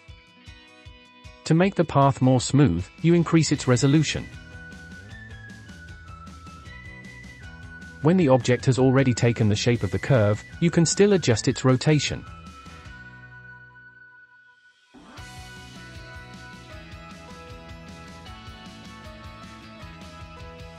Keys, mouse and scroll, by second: 0.1-1.6 middle drag, 1.6 click, 4.2 click, 6.4-6.8 shift+middle drag, 6.8 click, 8.6-10.5 drag, 14.1 ctrl+z, 14.7-15.2 scroll down 3, 15.2-15.7 middle drag, 15.7 click, 16.8-18.8 drag.